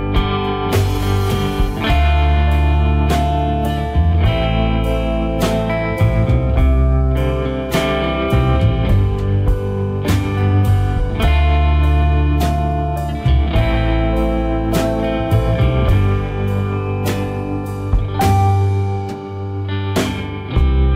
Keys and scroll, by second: 3.8 ctrl+t, 9.0 Return, 10.2 Down.